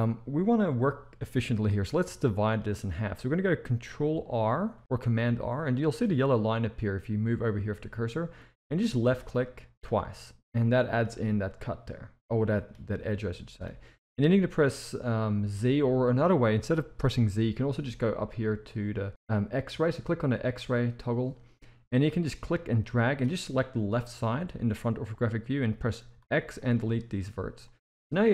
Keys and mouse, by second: 2.1 shift+middle click, 4.7 ctrl+r, 10.6 middle click, 11.6-12.6 middle drag, 12.9-13.6 middle drag, 20.5 click, 22.2-23.1 drag, 23.9 KP_1, 26.2 x, 27.6-27.9 middle drag.